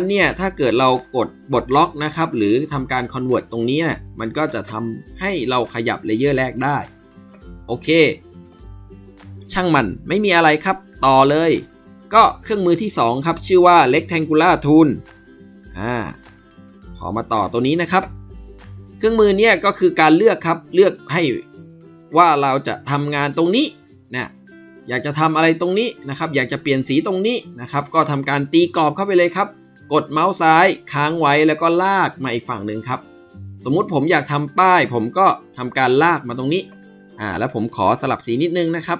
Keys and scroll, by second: 2.5 Escape, 15.0 ctrl+b, 15.9 ctrl+b.